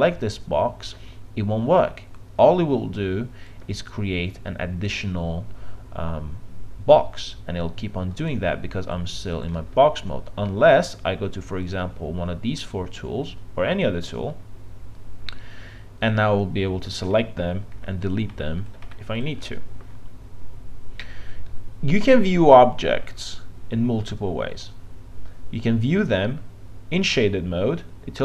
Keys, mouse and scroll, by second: 17.7 click, 17.9 click, 18.3 Delete, 18.8 Delete, 23.2-25.0 middle drag.